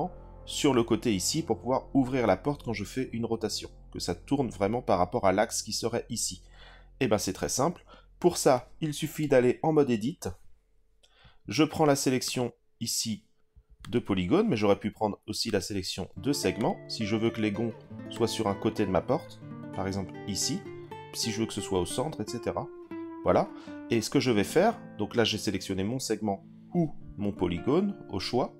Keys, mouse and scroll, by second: 9.8 Tab, 12.2 click, 13.8 click, 15.4 click, 16.6 click, 18.1 click.